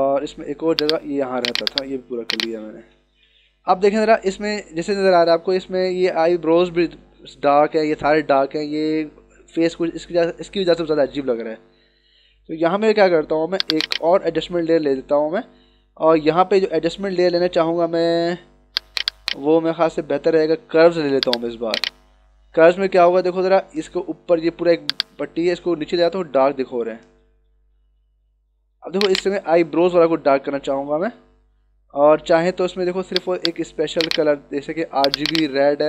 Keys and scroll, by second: 3.0 ctrl+-, 4.2 =, 4.8 ctrl+=.